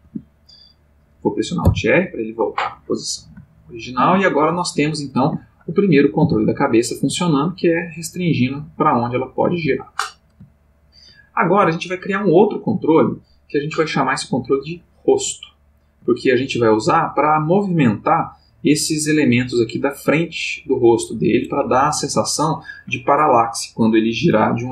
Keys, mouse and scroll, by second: 0.0 Escape, 1.6 alt+r, 3.6 ctrl+middle click, 4.5 shift+middle click, 5.4 ctrl+middle click, 6.2 r, 9.6 Escape, 10.6 ctrl+middle click, 11.8 shift+middle click, 15.4 ctrl+middle click.